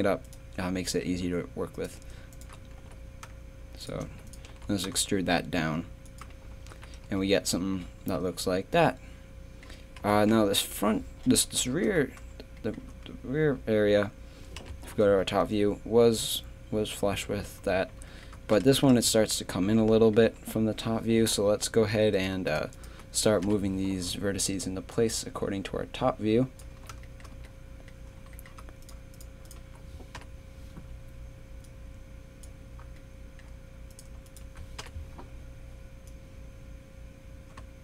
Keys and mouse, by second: 0.9 click, 2.8 e, 4.1 z, 4.5 g, 6.5 z, 6.7 a, 7.0 Tab, 10.0 KP_3, 14.6 KP_7, 18.8 Tab, 19.1-21.2 typing, 23.4 KP_7, 26.7 z, 27.3 z, 28.8-30.2 right drag, 30.2 KP_7, 33.0 middle click, 34.8 KP_7.